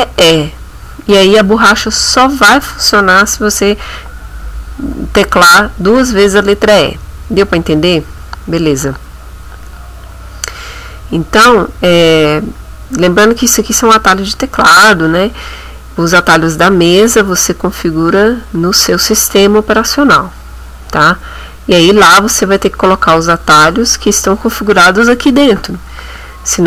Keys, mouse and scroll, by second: 11.8 scroll down 1, 13.0 scroll up 1, 14.6 click.